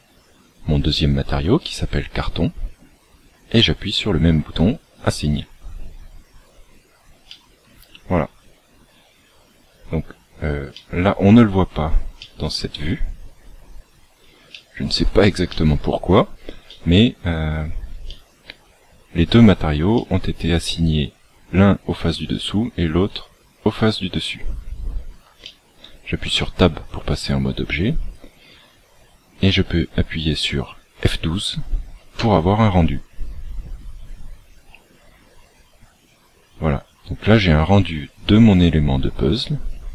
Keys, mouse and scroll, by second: 4.9 click, 7.2 middle click, 10.7 middle click, 14.4 shift+middle click, 15.4 middle click, 25.3 shift+middle click, 26.2 Tab.